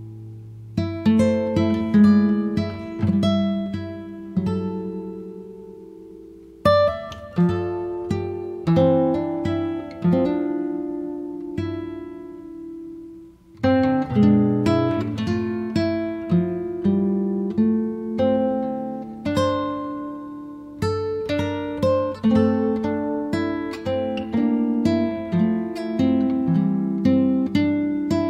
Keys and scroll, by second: 0.6 r, 3.7 space, 8.4 p, 9.4-10.7 typing, 11.6 Return, 12.4 space, 16.0 f, 17.7 3, 18.3 Return, 19.0 space, 20.6 t, 23.7 2, 24.0 0, 24.6 Return.